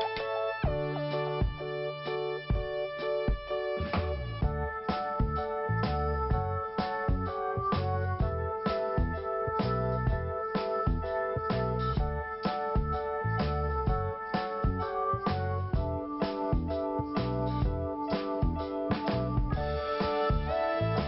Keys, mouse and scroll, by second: 0.5 scroll up 1, 1.4 scroll down 2, 2.4 click, 3.6-4.1 scroll down 2, 4.5 click, 7.3 scroll down 1, 8.4 click, 8.6 click, 9.3 click, 11.1 scroll up 1, 12.2 click, 12.3 click, 13.0 scroll down 1, 14.3 click, 15.9 scroll up 1, 17.6 click, 17.7 click, 18.9 click, 19.0 click, 19.6 click, 19.7 click, 20.3 scroll down 1.